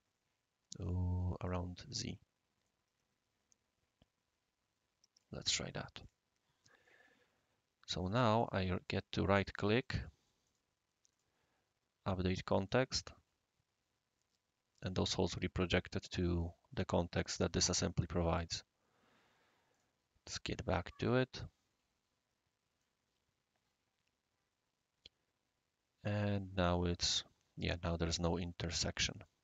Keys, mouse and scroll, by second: 0.8 click, 1.4 click, 2.6-5.2 right drag, 6.0 click, 6.5 scroll up 1, 6.6 scroll down 1, 6.8-7.9 middle drag, 6.8-7.9 right drag, 8.4 middle click, 8.4 right click, 10.4-12.6 right drag, 12.6 click, 19.7-21.0 right drag, 21.0-21.4 drag, 22.8-28.8 right drag, 29.2-29.4 right drag.